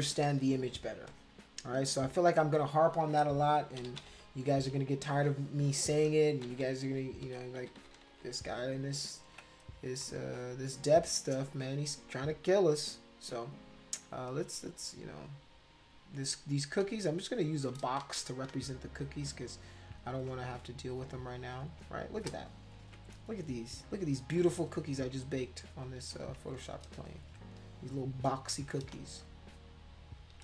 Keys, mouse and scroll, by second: 0.9 space, 1.1 click, 2.0 click, 3.8 ctrl+=, 4.0 ctrl+=, 4.1 ctrl+=, 4.8 space, 5.2 click, 6.4 ctrl+-, 6.6 ctrl+-, 6.9 ctrl+-, 7.2 ctrl+=, 7.6 ctrl+-, 7.8 ctrl+-, 7.9 ctrl+-, 8.1 ctrl+-, 9.3 ctrl+space, 10.0 click, 10.1 middle click, 10.7 click, 12.0 scroll up 2, 14.7 click, 16.5 click, 17.2 shift+click, 18.0 ctrl+z, 18.3 click, 18.8 shift+click, 19.5 shift+click, 20.1 click, 20.6 shift+click, 21.2 click, 21.5 click, 21.9 shift+click, 22.8 ], 23.6 click, 24.2 shift+click, 24.7 click, 25.2 shift+click, 25.8 shift+click, 28.7 click, 29.2 shift+click, 29.7 shift+click, 30.2 shift+click.